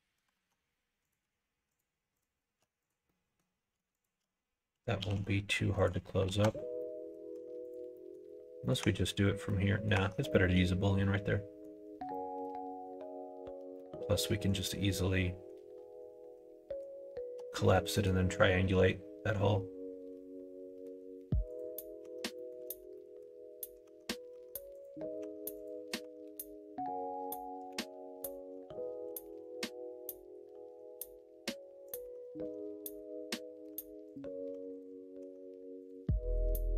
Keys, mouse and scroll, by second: 0.3 alt+z, 2.8 click, 3.0 middle click, 3.9 shift+click, 5.0 g, 6.2 alt+z, 6.7 middle click, 7.3 Tab, 7.6 click, 7.9 middle click, 8.6 middle click, 8.8 Tab, 9.4 middle click, 9.9 Tab, 10.3 middle click, 11.0 middle click, 12.1 middle click, 13.7 middle click, 17.9 middle click, 18.6-20.8 middle drag, 21.5 click, 22.0 Tab, 22.3 middle click, 22.6 alt+z, 22.9 middle click, 23.8 Tab, 24.3 Tab, 24.7 click, 25.2 Tab, 25.5 click, 26.0 Tab, 27.7 a, 29.1 g, 32.0 Tab, 32.8 middle click, 33.7 Tab, 34.1 click, 34.5 Tab, 34.7 click, 35.2 Tab, 35.8 click, 36.3 shift+click.